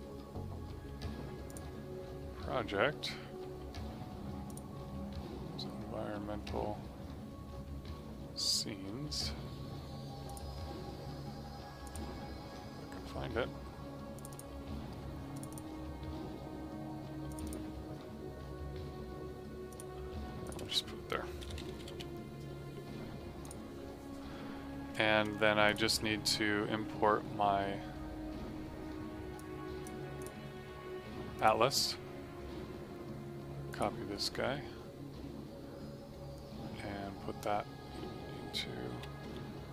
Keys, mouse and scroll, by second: 4.4 click, 4.4 typing, 10.2 click, 21.0-22.3 typing, 23.4 click, 29.3 click, 31.6 right click, 33.6 click, 38.5 super+Num_Lock, 38.8 e.